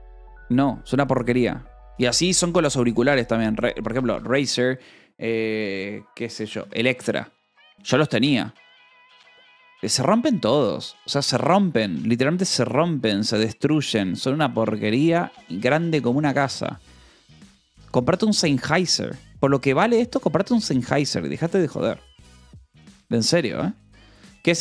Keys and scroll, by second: 4.0-5.2 typing, 8.5-9.3 typing, 10.8 Return.